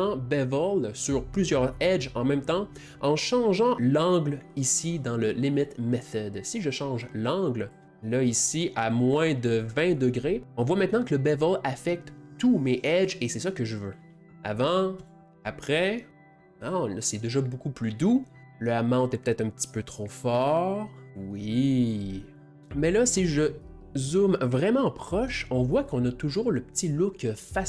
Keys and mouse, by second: 4.7-6.2 middle drag, 14.3 click, 15.0 click, 18.4-20.7 drag, 22.5-26.9 ctrl+middle drag.